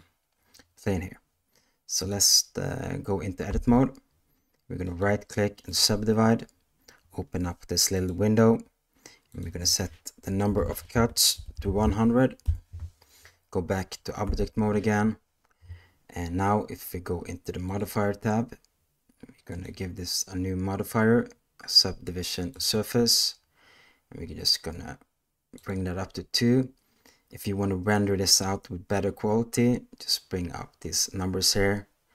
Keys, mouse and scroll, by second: 1.9 click, 3.4 Tab, 4.9-5.8 right drag, 9.3-12.5 drag, 10.7 BackSpace, 11.5 0, 14.2 Tab, 19.6-22.7 drag.